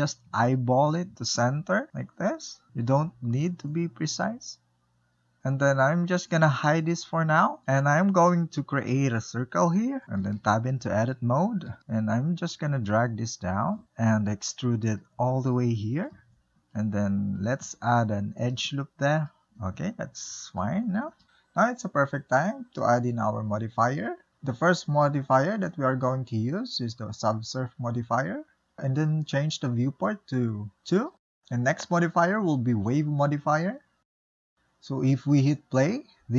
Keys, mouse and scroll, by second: 0.2 click, 0.9-1.5 shift+middle drag, 1.5-2.7 drag, 3.9-5.0 middle drag, 5.1-6.6 ctrl+middle drag, 6.6 click, 7.7 shift+a, 8.7 scroll down 2, 8.9-9.4 middle drag, 9.4 Tab, 10.3 1, 10.8-12.1 drag, 12.1 scroll down 3, 12.3-13.6 middle drag, 13.6 e, 14.6 shift+middle click, 15.3 g, 17.2 ctrl+r, 18.7 middle click, 19.3 Tab, 20.0-21.2 shift+middle drag, 25.5 click, 26.5 click, 27.4-28.7 drag, 29.3-32.3 drag, 33.1-34.9 drag.